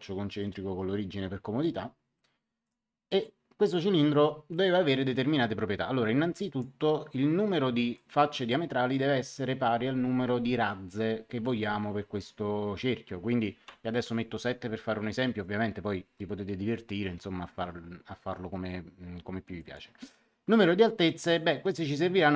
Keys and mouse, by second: 2.6 click, 4.1 middle click, 6.3 click, 7.9 click, 13.6 KP_7, 19.5 click.